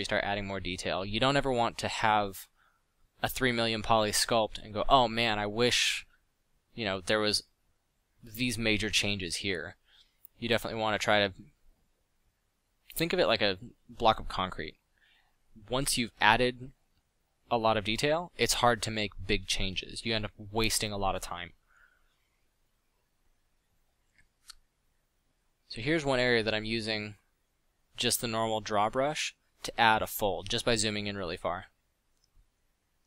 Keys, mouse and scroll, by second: 1.5 f, 2.2 click, 2.8 f, 6.3 f, 9.8 f, 13.4 f, 16.1 f, 19.1 f, 23.9 middle click, 24.5 f, 24.9 f, 26.2 f, 26.5 f, 30.8 f.